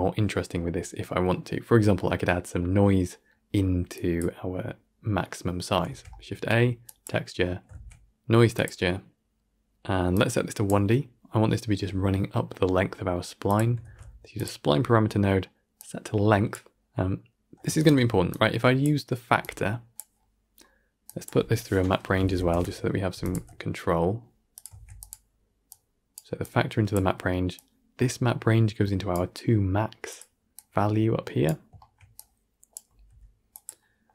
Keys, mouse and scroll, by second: 7.9 shift+a, 10.5-13.7 drag, 13.7 shift+d, 16.4 click, 17.7 ctrl+Right, 18.7 click, 20.9 drag, 23.2 x, 24.4 click, 24.6 shift+d, 25.6-26.0 drag, 30.4-31.3 drag, 32.0-32.6 drag.